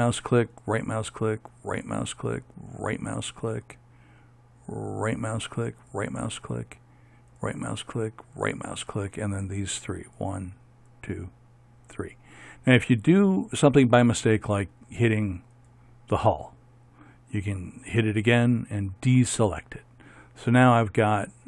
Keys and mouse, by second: 5.1-14.1 right drag, 15.7-20.6 right drag.